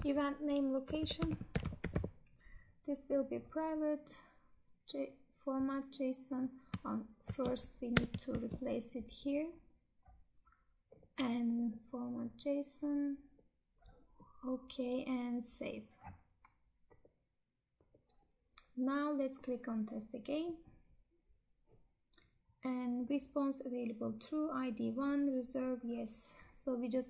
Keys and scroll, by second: 7.1 ctrl+a, 8.2 ctrl+v.